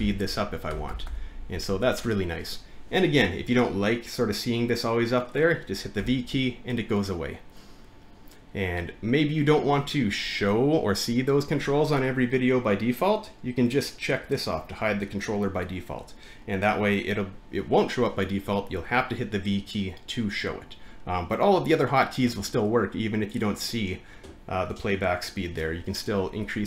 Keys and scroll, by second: 1.0 c, 1.1 super+BackSpace, 6.0 v, 8.5 v.